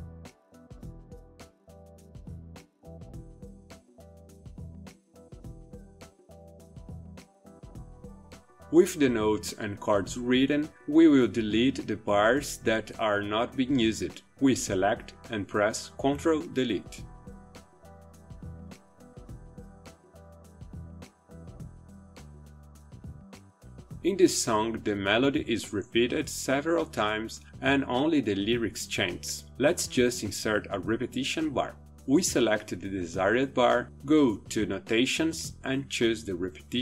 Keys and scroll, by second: 0.0-7.2 typing, 14.7 ctrl+Delete.